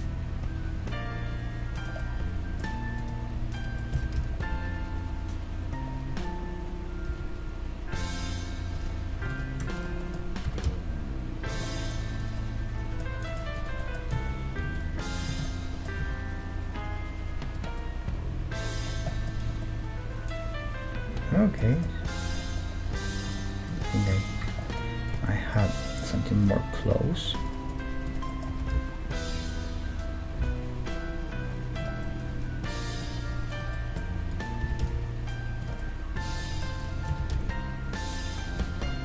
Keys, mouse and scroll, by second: 2.0-3.7 middle drag, 3.0-5.5 right drag, 3.9-5.8 middle drag, 4.0 g, 9.3-11.8 right drag, 10.1-12.2 middle drag, 10.5 g, 12.2-16.0 right drag, 14.1 z, 15.2 z, 16.0 g, 16.5 middle click, 17.7-21.5 middle drag, 19.5 Tab, 21.7-23.2 middle drag, 23.2 right click, 23.7 Tab, 24.1 Tab, 24.4 Tab, 25.2 middle click, 25.2 right click, 28.5 g, 29.7 middle click, 29.7 right click, 32.0 middle click, 33.5-36.2 right drag, 34.6 g, 36.2-37.7 middle drag, 36.8-38.6 right drag, 37.1 g.